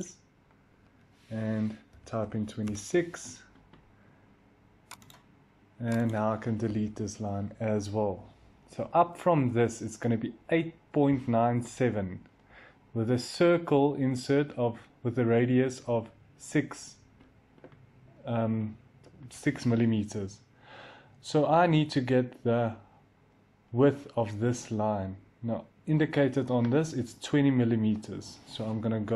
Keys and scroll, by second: 1.5-2.5 typing, 6.7 Delete.